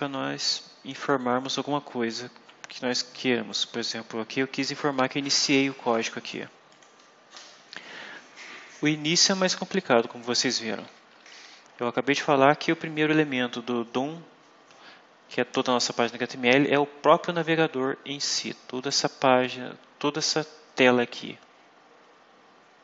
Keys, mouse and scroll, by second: 1.2 click, 5.5 click, 6.6 click, 11.0 Up.